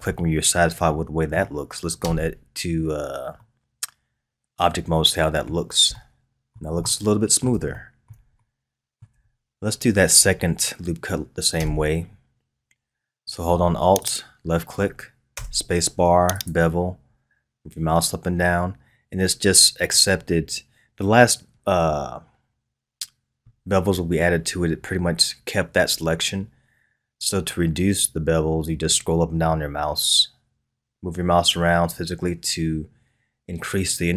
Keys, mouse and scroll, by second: 0.2-2.1 middle drag, 2.1 Tab, 3.0-3.4 scroll down 1, 3.4-9.4 middle drag, 9.4 scroll up 1, 11.7 Tab, 14.0 alt+click, 15.3 space.